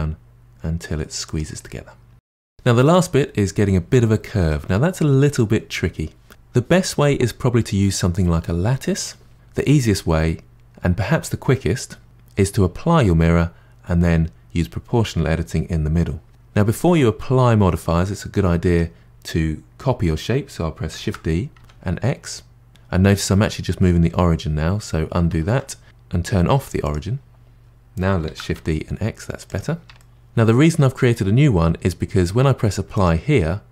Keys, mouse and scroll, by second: 1.6-4.5 middle drag, 4.8-5.4 scroll down 2, 5.4 middle click, 18.6 Tab, 21.0 shift+d, 25.3 ctrl+z, 26.6-27.7 drag, 28.2 shift+d, 30.0-30.6 middle drag, 32.9 click.